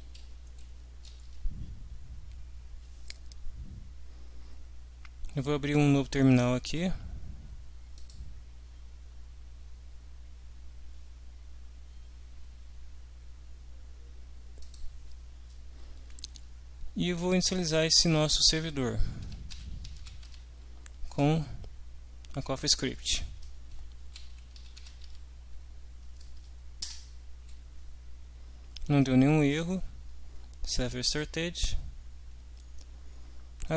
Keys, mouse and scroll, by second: 1.2 ctrl+s, 6.3 click, 7.9 click, 14.6 click, 19.0-20.4 typing, 23.8-25.3 typing, 26.8 Return.